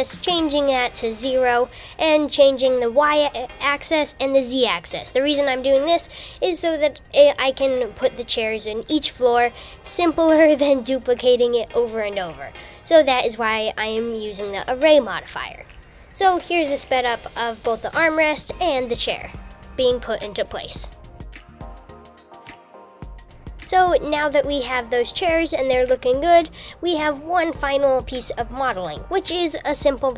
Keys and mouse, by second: 12.4 click, 12.5 super+z, 12.6 click, 12.8 KP_7, 13.1 shift+click, 13.5 shift+click, 13.8 shift+z, 13.8 shift+z, 14.6 shift+click, 15.1 KP_7, 15.3 shift+click, 15.6 click, 16.1 KP_7, 16.2 shift+click, 17.4 click, 17.6 click, 17.7 KP_7, 18.0 click, 18.4 shift+click, 18.9 shift+click, 19.4 shift+click, 19.5 shift+super+z, 19.5 shift+click, 20.9-21.7 typing, 21.8 Tab, 22.9 shift+click, 23.0 shift+super+z, 23.1 shift+click, 24.0-26.0 shift+middle drag.